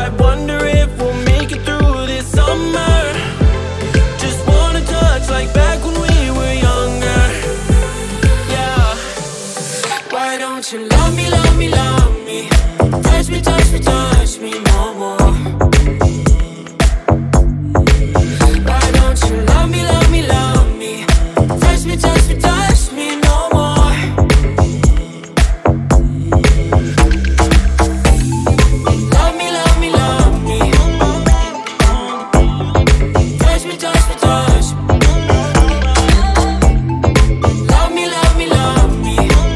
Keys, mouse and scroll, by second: 1.2 click, 2.7 click, 4.4 click, 4.8-7.3 middle drag, 7.3 ctrl+a, 12.9 ctrl+a, 17.2-17.7 middle drag, 17.7 click, 19.1 drag, 20.0 click, 21.8-22.5 drag, 23.2 click, 23.9 click, 24.6 click, 25.4-27.4 middle drag, 27.4 scroll up 2, 28.3 scroll up 5, 28.9-30.5 shift+middle drag, 30.5 click, 31.6-37.4 drag, 37.4 scroll down 2, 37.9 middle click, 38.6 click, 39.4 click.